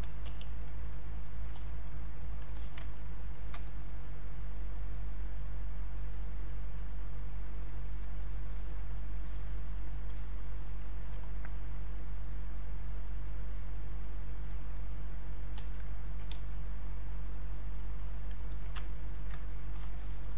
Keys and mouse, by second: 0.3 ctrl+q, 1.9 ctrl+click, 3.0 ctrl+right click, 4.0 click, 5.6 click, 6.7-8.5 drag, 8.5-10.0 alt+drag, 10.0 alt+click, 10.9 alt+click, 15.6 q, 16.1 alt+click, 16.3 space, 16.8 click, 18.4 space, 18.5 alt+click, 18.9 ctrl+right click, 19.8 alt+click.